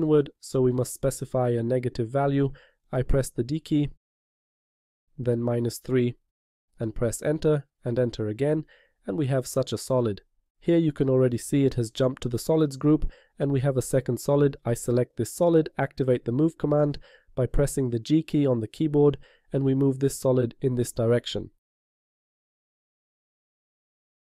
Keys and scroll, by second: 4.5 d, 5.9 -, 6.6 3, 17.7 g.